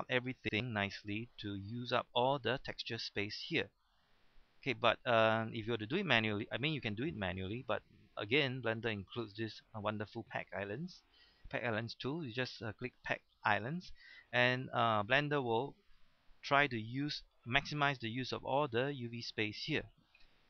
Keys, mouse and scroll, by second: 3.9-4.2 scroll up 1, 4.2-4.6 scroll down 1, 4.6-5.3 scroll up 1, 5.3-8.4 scroll down 1, 8.9 click, 16.0 shift+middle click.